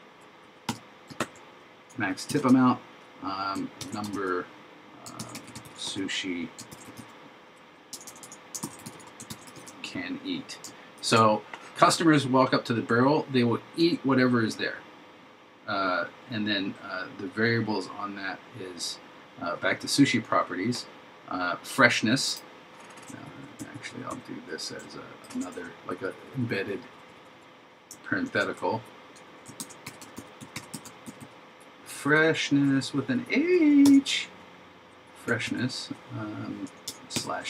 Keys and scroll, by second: 1.2 super+Right, 3.9 shift+3, 5.2 shift+s, 6.8 shift+e, 8.7 shift+c, 9.4 shift+e, 11.0 shift+0, 25.3 shift+0, 28.3 shift+9, 29.6 shift+f.